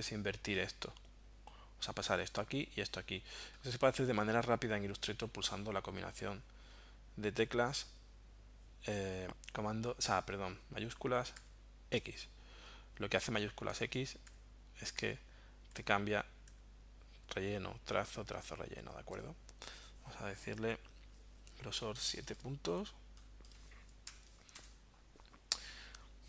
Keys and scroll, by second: 11.3 shift+x, 13.7-18.8 typing, 24.1 7, 24.5 Return.